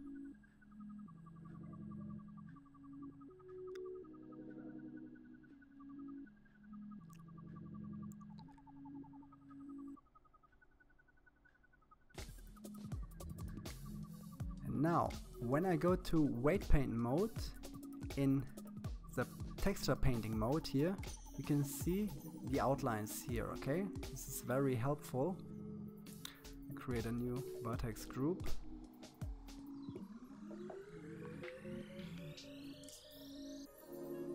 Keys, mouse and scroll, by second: 0.0-1.5 drag, 3.1 n, 4.2-5.3 shift+middle drag, 5.3-5.6 scroll down 1, 5.6-6.6 scroll up 2, 6.6 scroll up 1, 8.4 middle click, 9.2-9.7 scroll up 4, 9.7 shift+middle click, 10.6 scroll up 3, 11.4 shift+middle click, 12.3-13.7 scroll up 1, 13.7-16.3 drag, 19.3 click, 22.8 click, 25.1 click, 26.9 click, 27.6 space.